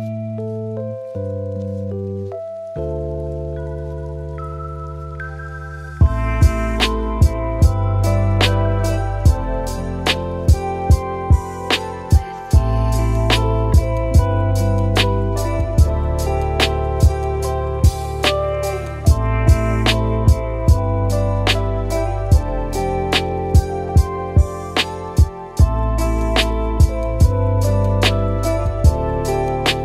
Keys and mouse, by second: 2.3 click, 3.0 click, 3.5 r, 5.3 s, 6.6-6.9 middle drag, 7.0 shift+middle click, 7.6 g, 9.7 g, 10.9-11.3 middle drag, 12.1 middle click, 12.9 click, 13.3-17.5 drag, 14.4 BackSpace, 15.2 BackSpace, 20.1 middle click, 22.3-22.7 middle drag, 24.9 click, 25.5 r, 27.4 s, 28.4 g.